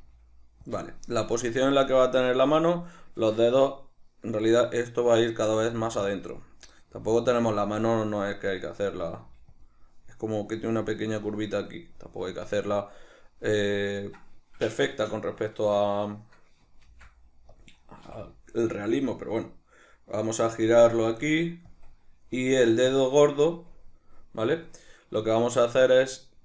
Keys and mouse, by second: 0.0 g, 0.8 click, 6.2 click, 6.6 right click, 6.9 g, 7.5 click, 8.6 right click, 9.2 g, 9.6 click, 16.8 shift+d, 17.6 click, 18.0 r, 20.7 click, 20.9 r, 21.8 click, 24.8-26.4 shift+middle drag.